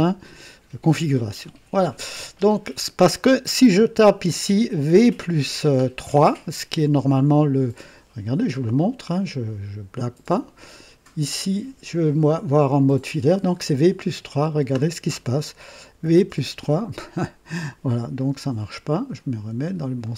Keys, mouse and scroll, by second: 11.2 click, 14.1 click, 16.0 v, 16.3 KP_3, 20.0 click.